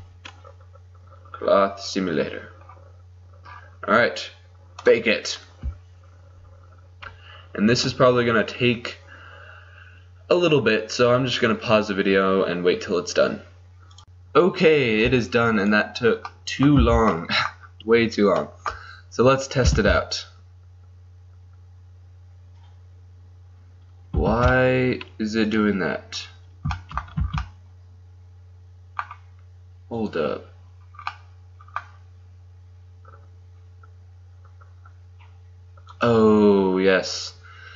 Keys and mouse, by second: 0.0 Return, 4.9-14.0 drag, 16.0-17.4 drag, 16.9 z, 17.4-18.6 middle drag, 19.9 alt+a, 24.4 alt+a, 25.6 click, 26.2-27.3 drag, 27.3 z, 30.0-32.1 drag, 36.0-37.7 drag.